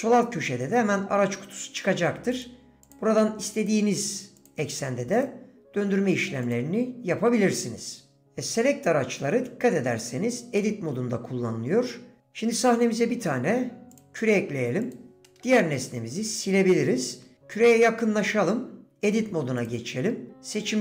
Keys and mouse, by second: 2.3 click, 2.8 click, 3.6 click, 4.4 click, 5.1 click, 6.5 click, 7.5 middle drag, 8.2 d, 13.3 shift+a, 16.3 Delete, 16.3-17.6 drag, 18.9 Tab.